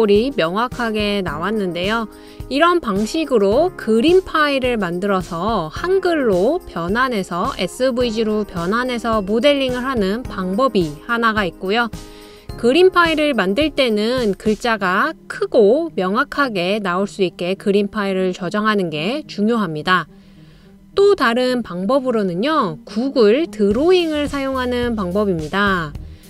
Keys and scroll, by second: 2.2-2.9 typing, 24.4-25.3 typing.